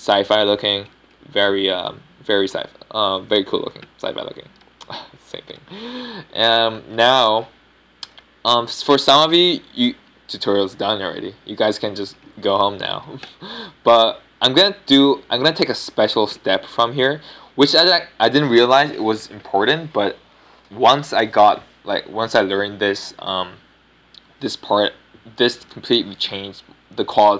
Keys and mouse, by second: 7.8 middle click, 15.0 x.